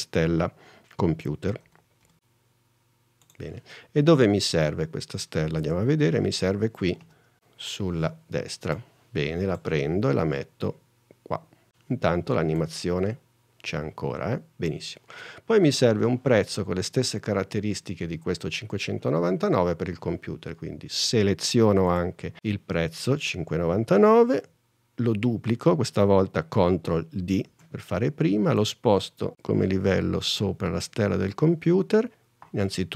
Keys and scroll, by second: 0.6 m, 0.9 d, 5.8 super+n, 27.6 super+d.